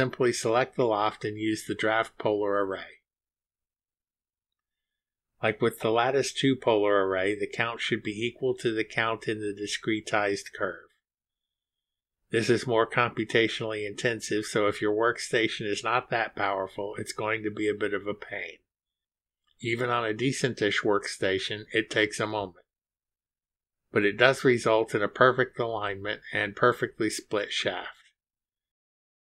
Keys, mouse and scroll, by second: 3.3 click, 5.0 click, 5.9-6.8 typing, 8.0 click, 10.9 click, 14.0-15.9 scroll down 1, 18.8-19.2 scroll down 1, 21.0 click, 22.0 ctrl+click, 25.1 click.